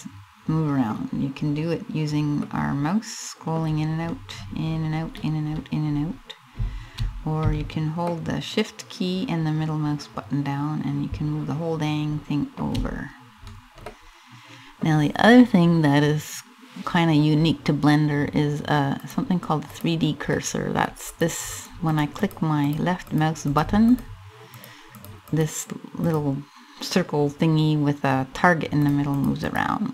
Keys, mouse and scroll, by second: 1.1-2.0 scroll up 3, 2.0 middle click, 3.2-4.0 scroll down 7, 4.0-4.8 scroll up 10, 4.8 scroll down 1, 4.9-5.4 scroll down 3, 5.4 scroll up 3, 7.1 scroll up 1, 7.6 shift+middle click, 12.3-13.1 shift+scroll down 4, 13.1-13.5 scroll down 3, 13.5 middle click, 16.0 scroll up 2, 18.5 click, 19.3 click, 20.0 middle click, 20.7 click, 21.3 click, 21.7 click, 21.9 click, 22.3 click, 22.7 click, 23.2 click, 23.5 click, 24.2 click, 24.6 click, 24.9 click, 25.7 click, 28.5 click, 28.8 click, 29.1 click.